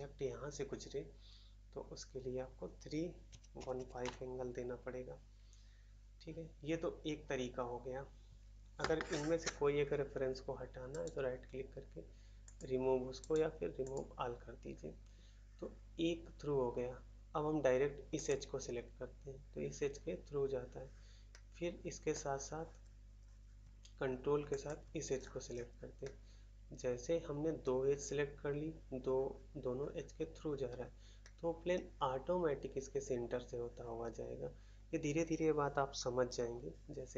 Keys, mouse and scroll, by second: 4.0 Return, 4.0 typing, 10.8 right click, 11.0 right click, 12.4 click, 12.5 click, 13.1 right click, 13.3 right click, 13.7 click, 13.8 click, 13.9 click, 18.1 click, 18.3 click, 21.2 middle click, 22.1 middle click, 22.6 scroll down 1, 24.4 ctrl+click, 25.1-25.9 scroll up 1, 25.9 middle click, 26.0 middle click, 27.6 middle click, 31.2 middle click, 31.7 middle click, 32.3 middle click.